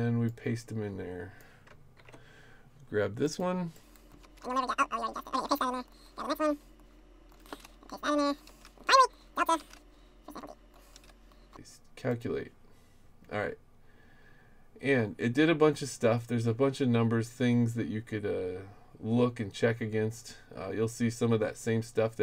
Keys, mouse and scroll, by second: 0.3-1.4 drag, 2.0 ctrl+v, 3.2 click, 3.7-4.1 drag, 4.3 ctrl+c, 5.0 click, 5.5 ctrl+v, 5.8 click, 6.0-6.4 drag, 6.8 click, 7.6 ctrl+c, 8.1 click, 8.6 ctrl+v, 8.9 click, 9.1 click, 9.7 ctrl+c, 10.4 click, 11.0 ctrl+v, 12.1 click, 14.9-16.1 scroll down 1, 20.0 middle click, 20.0-20.7 scroll down 1, 20.2 middle click, 20.4 middle drag.